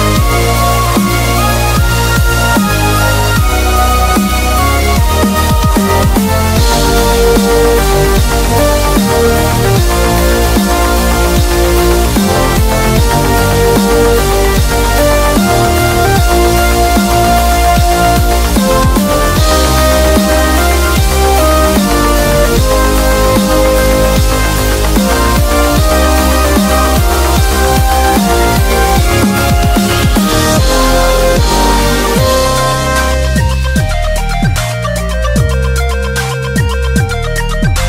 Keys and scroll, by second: 0.0-2.9 typing, 4.4-5.6 typing, 9.5 super+-, 9.6 super+-, 10.4-11.5 typing, 16.4 typing, 17.5 [, 18.8 typing, 23.3 typing, 24.8-29.4 typing, 33.1 super+-, 33.3 super+-, 33.5 super+-.